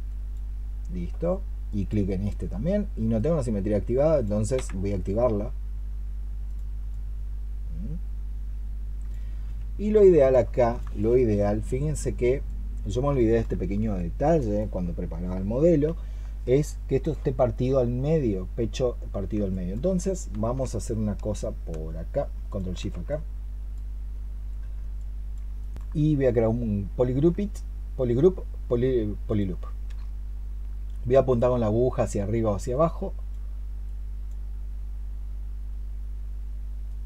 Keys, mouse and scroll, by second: 4.4 x, 6.8 double click, 10.4 alt+click, 10.8 alt+click, 19.4 alt+click, 22.3 ctrl+shift+click, 25.4 alt+click, 27.1-29.8 space.